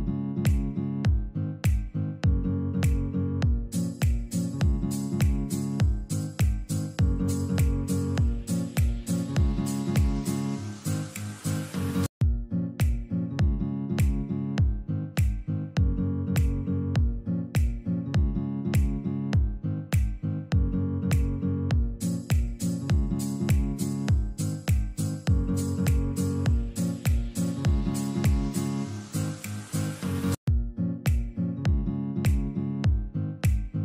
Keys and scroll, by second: 1.9 F4, 2.1 Escape, 4.4 shift+F2, 4.7 F3, 12.5 F4, 12.9 Escape, 13.9 F3, 14.5 Escape, 15.3 F2, 18.7 space, 19.4 ctrl+shift+a, 22.2 ctrl+shift+a, 27.6 ctrl+r.